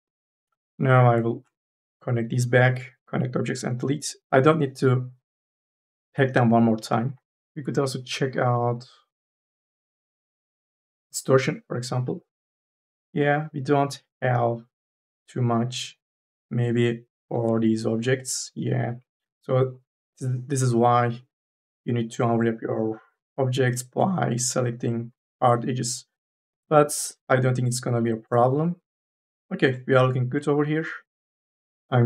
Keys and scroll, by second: 0.3 4, 4.1 3, 17.1 3, 17.4 e, 26.3 4, 26.5 e.